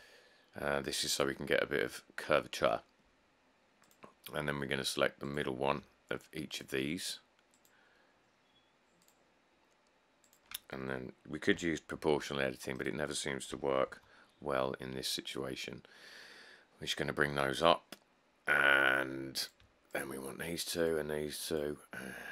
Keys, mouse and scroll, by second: 0.4 click, 0.8 click, 12.2 z, 13.7 g, 14.1 z.